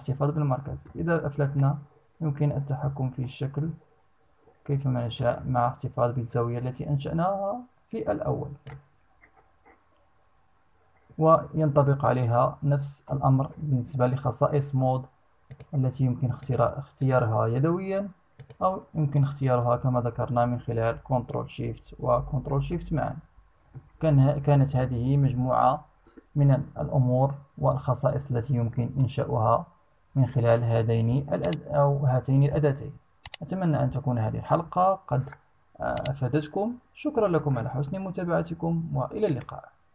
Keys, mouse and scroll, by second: 15.1 click, 15.9 click, 16.5 click, 17.9 click.